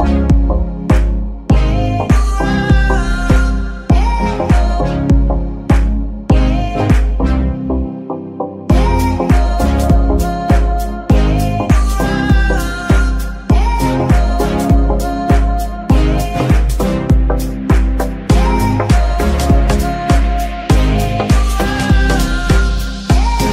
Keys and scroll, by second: 9.4 z, 13.7 g, 13.9 y.